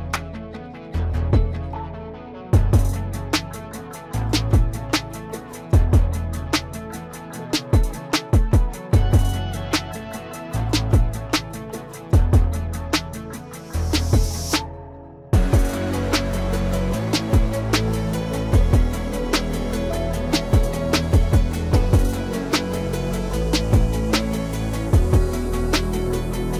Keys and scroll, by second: 10.4 ctrl+s.